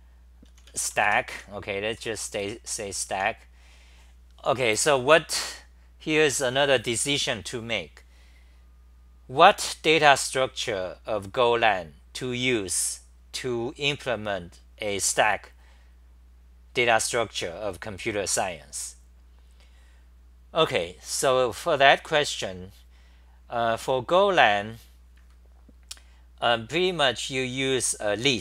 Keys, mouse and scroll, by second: 1.3 Home, 2.0-3.6 typing.